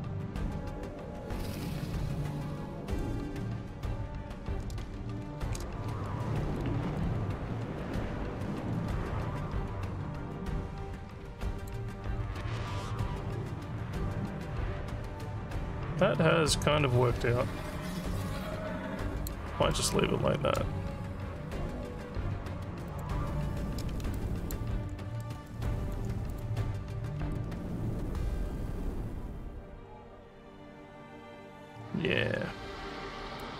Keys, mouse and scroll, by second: 5.3 Tab, 6.7 alt+middle click, 7.0-11.7 alt+drag, 12.0 scroll up 1, 12.4-19.3 alt+drag, 19.7 alt+middle click, 21.5-22.1 scroll down 5, 22.9 click, 24.1 alt+click, 24.8 alt+scroll down 1, 25.2 alt+middle click, 25.6 alt+click, 26.3 click, 27.3-33.4 alt+drag.